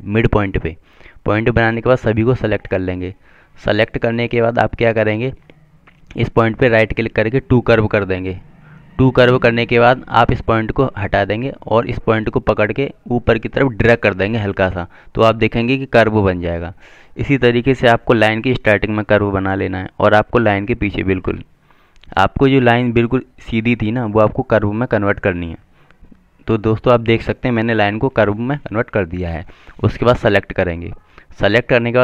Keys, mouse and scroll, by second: 1.7 click, 1.9 double click, 3.6 click, 7.2 right click, 10.4 click.